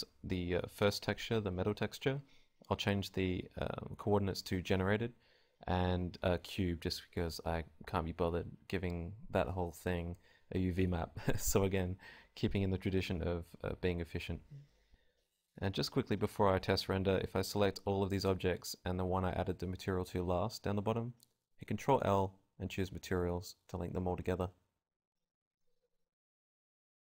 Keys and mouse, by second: 16.2 middle click, 16.6-18.9 typing, 17.6 right click, 18.3-24.8 drag, 24.8 ctrl+l, 25.2 click, 26.0 a, 26.0 KP_0.